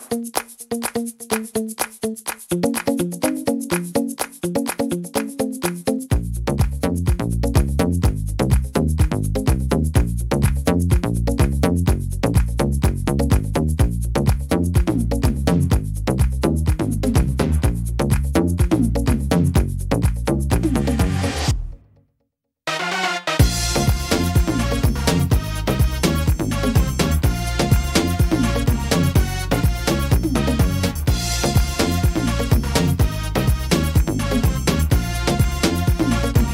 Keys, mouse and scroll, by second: 0.1 shift+middle click, 2.5 middle click, 3.5-4.9 shift+scroll up 6, 3.5 shift+middle click, 4.3 middle click, 5.5 right click, 7.1 click, 8.2 right click, 8.8 shift+right click, 9.2 middle click, 11.6 scroll down 1, 12.1 shift+middle click, 13.7 e, 16.7 click, 19.2 middle click, 20.4 right click, 20.9 shift+right click, 21.4 middle click, 22.4 e, 24.5 middle click, 26.9 middle click, 28.3 ctrl+r, 29.9 right click, 30.5 shift+right click, 30.8 middle click, 31.8 click, 33.8 middle click, 36.0 right click.